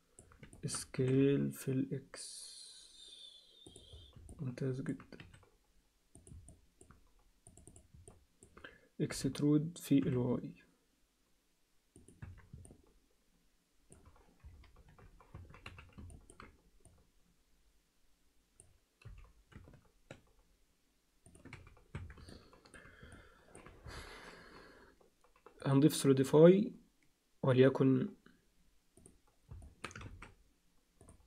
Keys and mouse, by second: 0.6 alt+shift+middle click, 0.9 s, 4.3 alt+middle click, 5.2 s, 6.5 alt+middle click, 7.5 click, 7.7 click, 8.0 alt+middle click, 9.1 e, 12.2 Tab, 12.6-13.9 alt+middle drag, 14.4 KP_3, 15.3 Tab, 15.6 z, 16.1 ctrl+alt+middle click, 16.9-18.6 drag, 19.0 g, 21.6 z, 21.9 Tab, 22.3 alt+middle click, 23.2 alt+middle click, 25.7 click, 26.3-29.1 drag, 29.6 middle click, 30.1 ctrl+a.